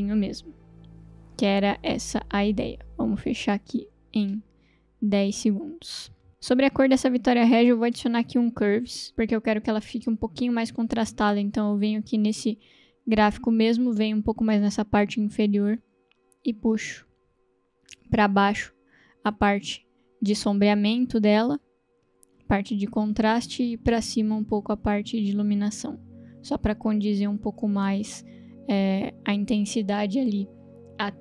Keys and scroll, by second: 1.3 space, 4.4 n, 8.1 ctrl+space, 8.3-9.5 typing.